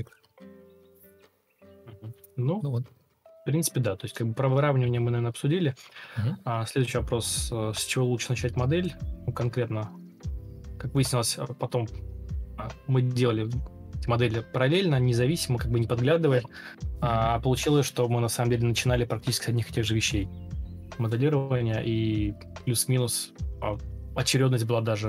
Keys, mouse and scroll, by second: 1.3 ctrl+m, 3.7 alt+scroll up 1, 4.5 alt+click, 5.8 alt+click, 6.8-8.5 typing, 12.6 ctrl+space, 13.5 ctrl+space, 16.1 Escape, 17.6 ctrl+c, 18.9 ctrl+v, 18.9 space, 20.1-21.2 typing, 24.5 shift+r.